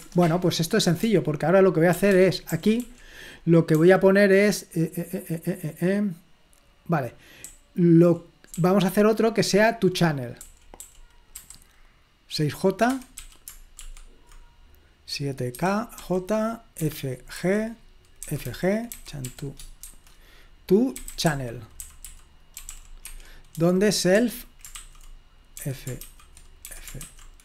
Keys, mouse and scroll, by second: 0.0 Return, 2.3-3.8 typing, 7.5 typing, 8.5-11.3 typing, 12.9-14.3 typing, 15.6 typing, 16.9 typing, 18.3-27.4 typing.